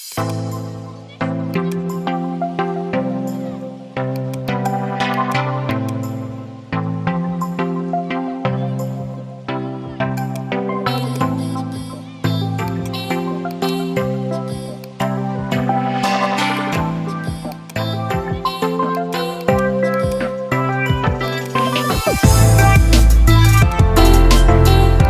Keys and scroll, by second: 1.1 ctrl+z, 7.1 ctrl+z, 11.7 ctrl+z, 15.8 ctrl+z.